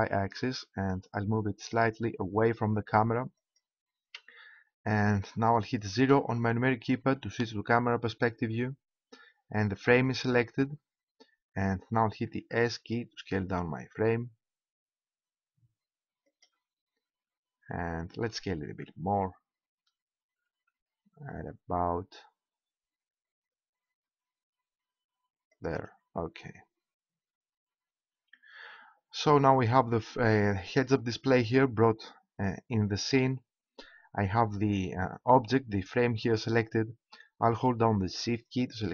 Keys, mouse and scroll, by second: 3.5-5.3 drag, 6.0 KP_0, 7.0-10.4 middle drag, 10.4 click, 10.6-13.0 middle drag, 12.3 s, 16.4 click, 18.6 s, 25.5-31.9 drag, 33.0-38.9 middle drag.